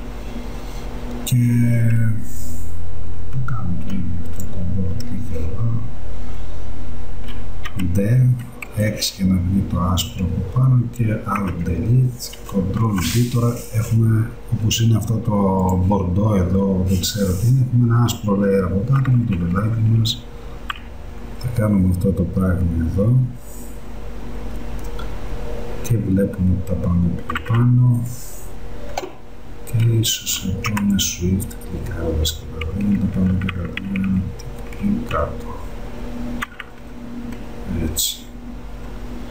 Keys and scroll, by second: 7.7 d, 11.5 alt+Delete, 19.0 Up, 32.7 Down.